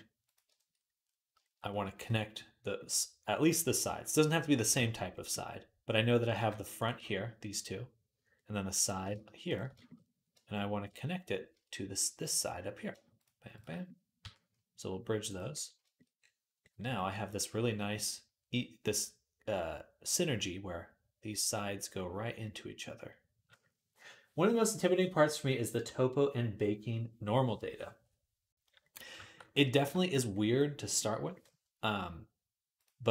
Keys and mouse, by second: 6.6 shift+click, 6.7-8.6 middle drag, 8.6 click, 8.8-13.0 shift+middle drag, 13.0 shift+click, 13.1-17.1 shift+middle drag, 14.0 q, 17.1-33.1 drag.